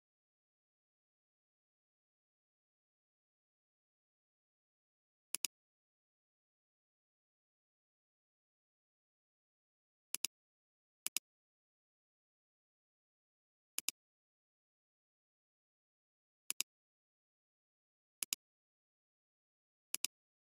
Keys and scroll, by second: 9.4 ctrl+t.